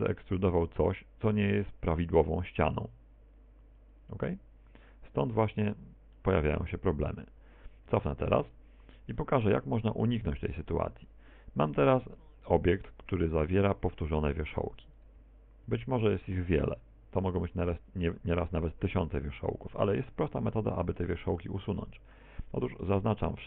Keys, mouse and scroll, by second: 1.5 shift+right click, 3.0 shift+right click, 3.5 shift+middle click, 4.0 middle click, 4.4 z, 4.8 middle click, 6.2 e, 10.3 click, 11.7-12.2 scroll down 2, 12.2 scroll down 2, 12.6 middle click, 14.3 ctrl+z, 15.2 a, 15.3 a, 16.6 right click, 17.1 Tab, 19.2 z, 19.8 right click, 20.2 g, 21.4 right click, 21.6 g, 22.7 right click, 22.8 g.